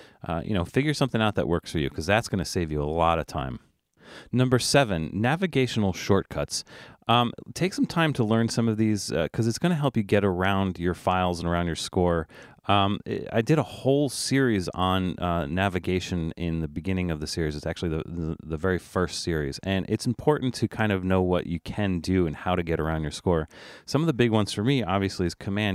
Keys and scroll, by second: 25.4 super+e.